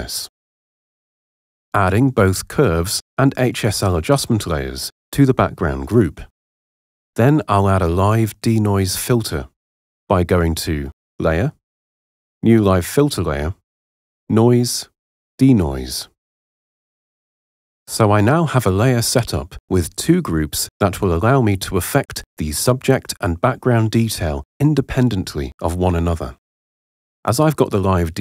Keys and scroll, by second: 4.8 super+u.